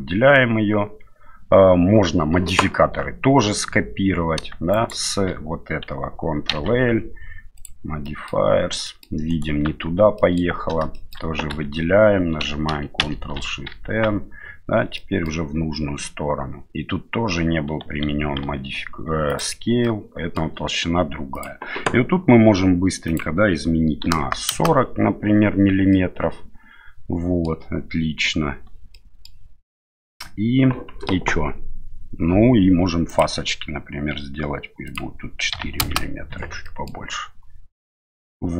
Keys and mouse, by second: 4.7 shift+right click, 6.5 ctrl+l, 8.0 middle click, 8.8 middle click, 9.3 right click, 9.6 Tab, 10.2 middle click, 10.9 shift+middle click, 11.5 a, 13.0 ctrl+shift+n, 13.8 Tab, 14.9 middle click, 18.4 ctrl+a, 19.8-20.4 middle drag, 21.3 click, 23.1-25.1 drag, 25.9-27.5 middle drag, 28.9-29.2 middle drag, 34.9-36.3 drag, 36.6 middle click.